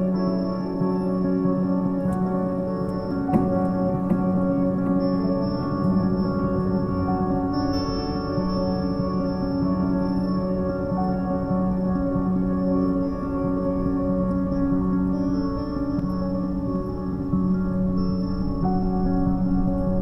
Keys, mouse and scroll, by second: 0.9 r, 3.0 scroll down 3, 3.8 KP_7, 4.8-5.1 shift+middle drag, 5.1 scroll up 4, 5.5 g, 7.0 r, 8.8 shift+d, 9.4 r, 10.5 g, 12.8 g, 14.5 shift+d, 15.2 r, 16.6 g, 18.3 shift+d, 18.9 r, 19.9 g.